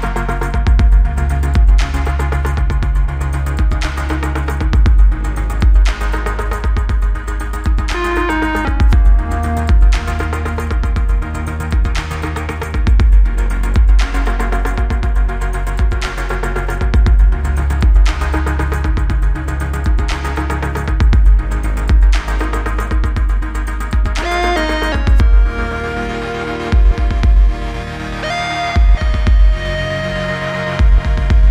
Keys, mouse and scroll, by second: 0.0-2.3 typing, 2.4 Return, 3.6-4.1 click, 4.8-5.9 typing, 6.8-7.7 click, 11.1-11.7 click, 13.2 Return, 14.0 click, 15.3 u, 15.8-17.3 click, 20.6 F9, 21.5 click, 22.2 right click, 23.4 click, 26.6 click, 28.8 space, 31.0 space.